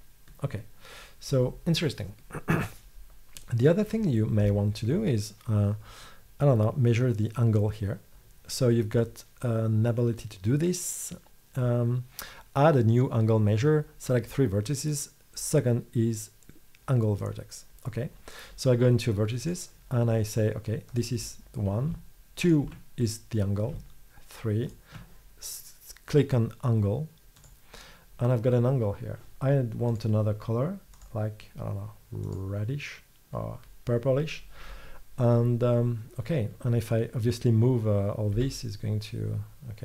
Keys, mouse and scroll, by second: 21.0-24.7 middle drag, 38.5 g.